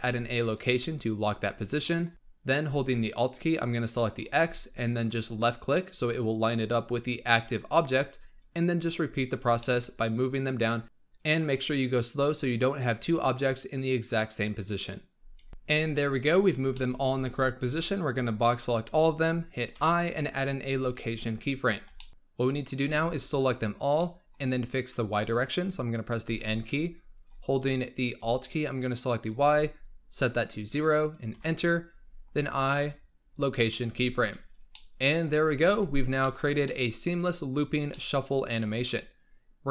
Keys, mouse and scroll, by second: 1.3-1.8 scroll up 4, 1.8-2.1 shift+middle drag, 4.1-5.3 alt+drag, 8.1 scroll up 3, 9.2 scroll down 2, 9.5-10.8 shift+middle drag, 10.8-13.7 scroll up 1, 14.7-15.2 scroll up 3, 15.5 shift+middle click, 15.6 g, 15.8-16.6 scroll down 11, 16.6-17.0 shift+middle drag, 17.0 b, 19.6 i, 21.3 scroll up 4, 21.9 shift+middle drag, 22.1 scroll down 10, 22.8 b, 23.9-24.5 middle drag, 24.5-26.2 scroll down 4, 26.2 n, 29.0-32.1 alt+drag, 32.7 i, 34.6-35.5 middle drag, 35.5 alt+a, 35.8 scroll up 2, 36.1-37.7 shift+middle drag, 37.7 scroll down 2, 37.8-38.5 middle drag, 38.5 scroll up 1.